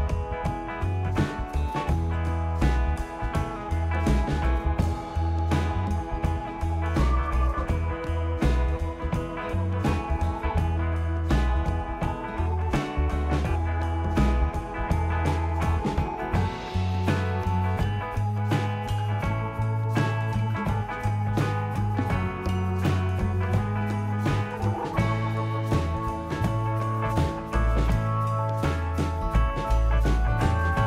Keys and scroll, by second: 24.4 ctrl+d.